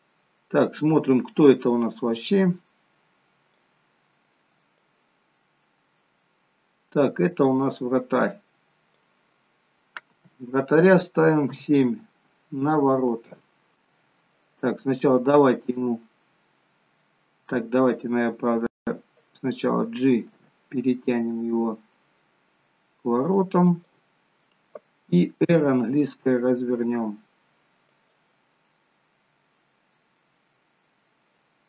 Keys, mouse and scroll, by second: 2.5 click, 7.5 click, 9.8-10.5 scroll down 5, 11.6 KP_7, 12.7-13.6 scroll down 4, 16.0-16.7 scroll up 1, 16.7-17.2 scroll down 1, 17.5-18.0 scroll down 5, 20.2 g, 25.7 r, 28.7-29.6 scroll up 6, 29.4 middle click, 30.3 middle click, 31.5-31.6 scroll up 1.